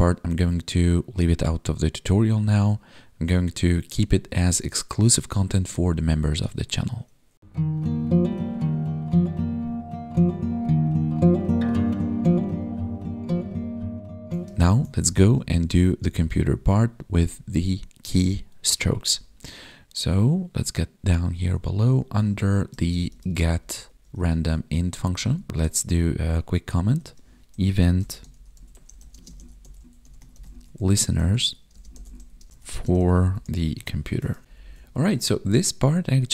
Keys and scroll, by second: 14.4 ctrl+Left, 14.9 Left, 15.2 ctrl+shift+Right, 15.9 ctrl+shift+Left, 16.2 ctrl+shift+Right, 17.0 Down, 19.0 Down, 24.8 Down, 25.5 space, 29.1 space, 31.3 ctrl+s, 31.7 space, 32.7 space, 34.2 ctrl+s, 34.4 ctrl+Down.